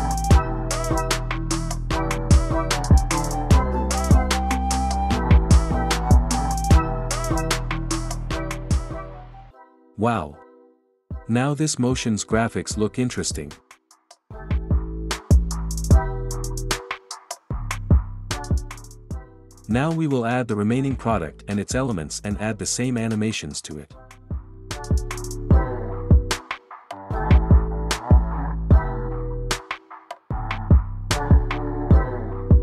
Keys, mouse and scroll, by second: 3.0 space, 9.8 space, 17.4 click, 22.4 click, 23.4 click, 24.0 click, 24.8 click, 26.2 click, 26.7 click, 27.5 click, 28.2 click, 29.2 click, 30.0 click, 30.6 click, 31.0 click, 31.7 click, 32.3 click.